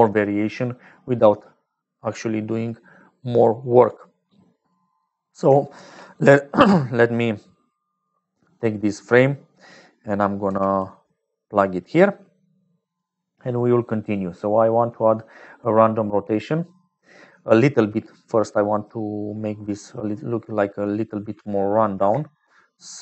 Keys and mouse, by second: 0.0 click, 3.3 click, 4.3 click, 5.7 shift+d, 8.9 click, 19.9 click, 20.9 click.